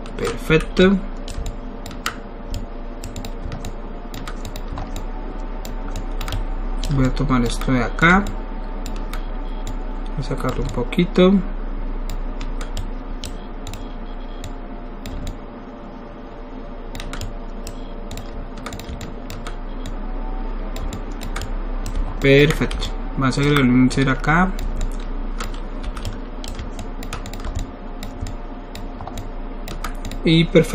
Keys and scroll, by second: 0.5 alt+w, 25.8 alt+w, 26.5 alt+w.